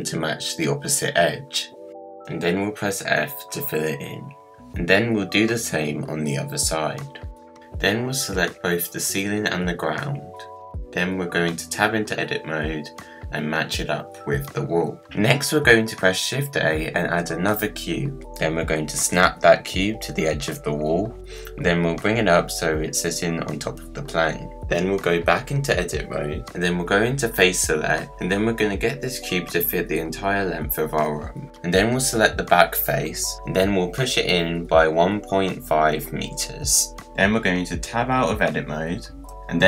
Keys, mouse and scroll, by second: 0.8 g, 2.5-3.2 scroll down 1, 3.2 click, 4.0 f, 4.4 click, 4.9 KP_Decimal, 5.1 middle click, 5.2 scroll down 1, 5.4 click, 5.9 g, 6.6 scroll down 1, 6.7 click, 7.3 f, 7.4 click, 7.6 middle click, 8.4 Tab, 8.6 scroll down 3, 8.7 middle click, 8.9 scroll up 2, 9.1 click, 9.5 KP_Decimal, 9.8 scroll down 3, 9.9-10.4 middle drag, 10.4 shift+click, 10.7-11.1 scroll up 1, 11.2 Tab, 11.9 click, 12.6-13.1 scroll up 1, 13.1 g, 14.5 scroll down 1, 14.6-15.7 middle drag, 15.7 Tab, 16.0 click, 16.4 shift+a, 18.3 g, 20.0 KP_Decimal, 20.4-21.0 scroll down 5, 21.0-21.9 middle drag, 21.9 g, 23.8 g, 25.2 scroll down 6, 25.4 middle click, 25.7 Tab, 25.9-26.6 scroll down 2, 26.6 3, 27.0 click, 27.9 g, 31.0 middle click, 31.5-31.9 scroll up 6, 31.9-33.0 middle drag, 33.0 click, 33.6 g, 37.0 scroll down 1, 37.3 middle click, 37.8-38.5 scroll down 6, 38.6 Tab.